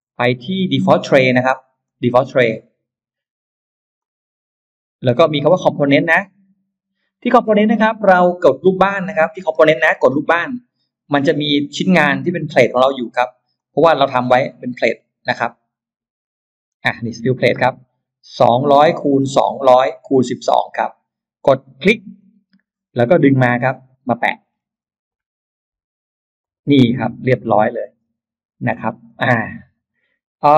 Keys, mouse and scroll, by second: 0.6 click, 1.7 click, 3.8 click, 5.9 click, 10.6 click, 11.4 middle click, 12.1-12.4 scroll down 2, 13.4-16.6 drag, 22.0 click, 24.1-24.9 scroll up 4, 26.2 click, 26.8-28.1 scroll down 4, 30.4-30.5 scroll up 2.